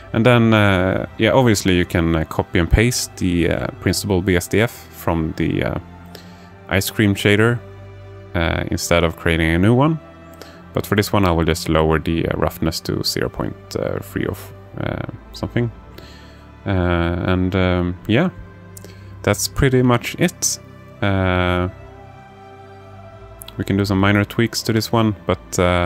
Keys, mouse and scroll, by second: 9.0-16.0 drag, 19.8 click, 21.1 alt+shift+middle click, 21.7 alt+shift+middle click, 22.6 alt+shift+middle click, 24.6-25.8 drag.